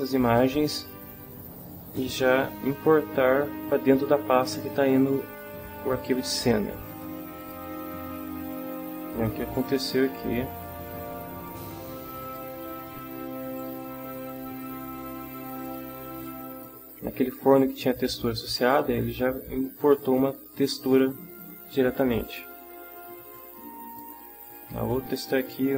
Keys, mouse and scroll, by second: 6.9 click, 7.4 click, 9.2 click, 12.1 click, 13.6 click, 15.6 click, 16.2 click, 22.2 click, 23.9-25.7 drag.